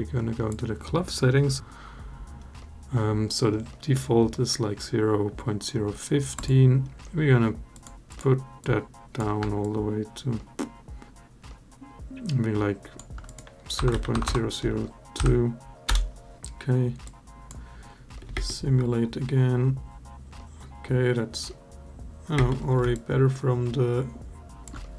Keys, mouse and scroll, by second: 6.1-7.9 drag, 8.4 click, 9.4-12.8 shift+drag, 13.0-15.7 drag, 14.0 0, 16.9-17.3 drag, 18.1 space, 22.1 space, 22.7-24.4 alt+drag.